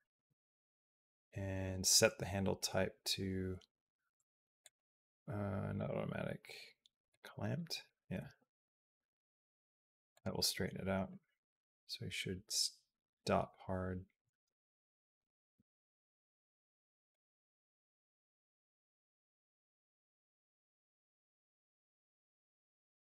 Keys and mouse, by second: 5.6-7.0 right drag, 8.0 g, 10.9-15.0 drag, 15.3 g, 17.5-20.1 drag, 20.2 g, 21.4-22.9 drag.